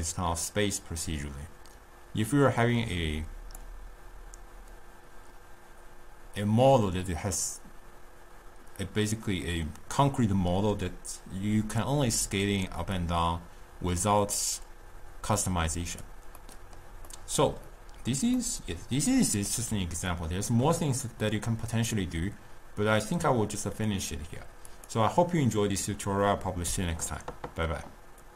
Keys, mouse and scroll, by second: 13.0-16.1 drag, 16.4-23.9 middle drag, 24.8 click.